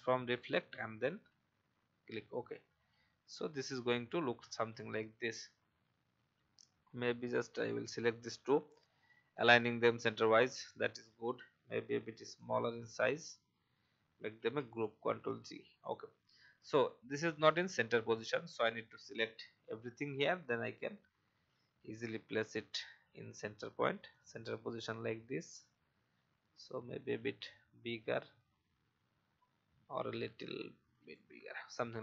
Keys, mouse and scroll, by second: 1.3-1.9 typing, 5.1-5.8 typing, 7.9 shift+click, 12.4 shift+click, 14.4 ctrl+g, 15.0 alt+scroll down 1, 15.8-22.5 drag, 22.9 alt+scroll up 1, 24.1 click, 26.5-28.0 alt+shift+drag, 30.4 alt+shift+click.